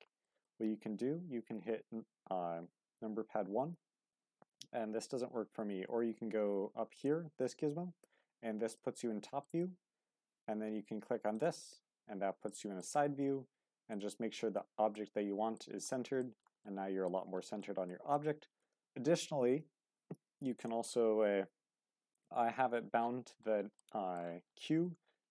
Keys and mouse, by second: 0.2 shift+middle drag, 1.7 KP_1, 6.9 click, 8.7-9.4 shift+middle drag, 11.3 click, 12.4 shift+middle click, 14.9-15.6 middle drag, 16.2 shift+middle drag, 16.6-17.1 middle drag, 17.6-17.9 shift+middle drag, 18.1 middle click, 23.8 middle click, 24.9 q.